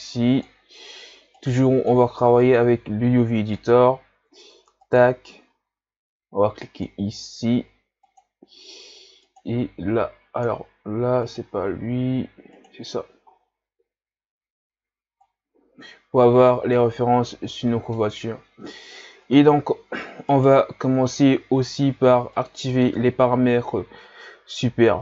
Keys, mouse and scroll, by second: 0.0-12.6 drag, 18.9-19.3 scroll down 3, 20.3 right click.